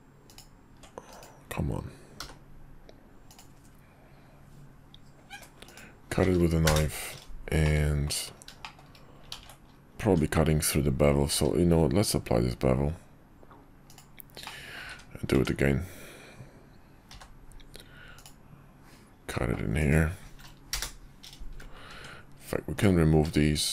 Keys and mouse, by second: 2.2 k, 7.6 middle click, 8.6 shift+middle click, 9.3 ctrl+z, 10.0 Tab, 11.3 q, 14.4 middle click, 15.0 `, 15.4 Tab, 17.1 k, 21.9 Tab, 22.7 alt+click.